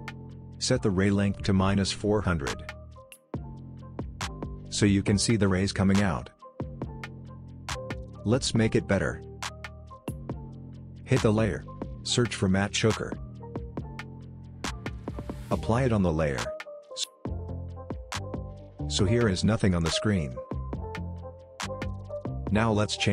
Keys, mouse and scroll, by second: 1.2 click, 3.8 click, 3.9-4.3 scroll up 1, 4.3-5.6 scroll down 1, 5.6-6.8 drag, 7.1-7.4 scroll up 1, 7.4-8.1 scroll down 1, 8.1-8.7 click, 12.3-13.6 typing, 15.9 click, 17.6-19.3 scroll up 1, 21.2-23.1 drag.